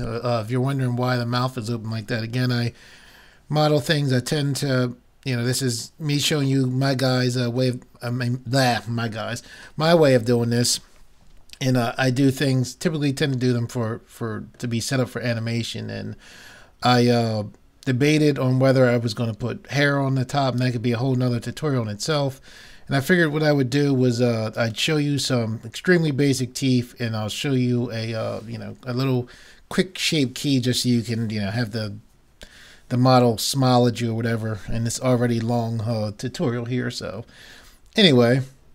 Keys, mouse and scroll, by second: 4.4-5.5 middle drag, 13.6-15.5 middle drag.